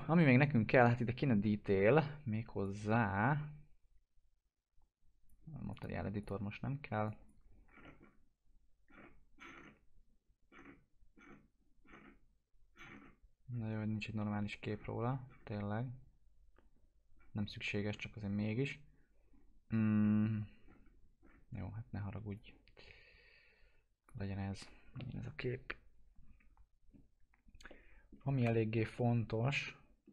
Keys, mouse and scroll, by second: 2.6 click, 7.6-12.3 scroll down 1, 17.1-17.6 scroll down 1, 22.3-27.9 drag, 27.9 middle click, 28.3 F4, 28.9-30.1 alt+middle drag.